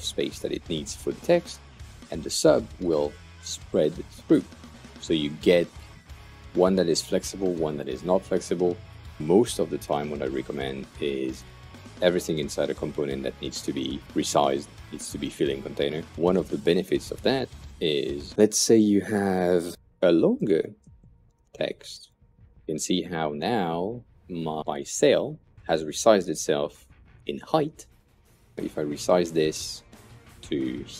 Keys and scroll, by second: 12.2 Return, 17.6 Return, 18.3-22.8 typing.